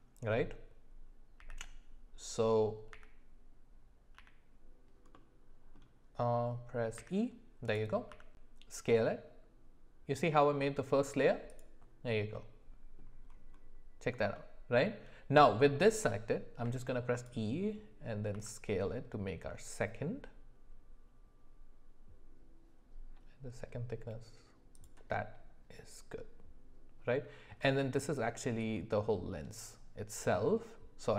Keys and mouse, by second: 5.2 middle click, 7.0 e, 8.1 s, 12.3 middle click, 14.3 shift+middle click, 16.6 e, 18.3 s.